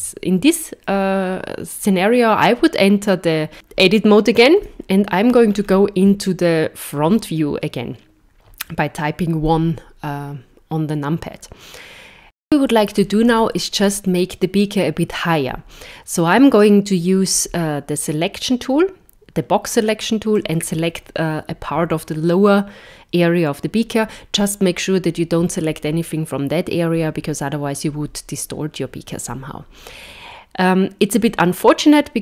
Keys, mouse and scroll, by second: 0.0 Tab, 4.6 KP_1, 5.5 scroll down 5, 6.3 shift+middle click, 18.0 click, 19.7 click, 31.3 middle click.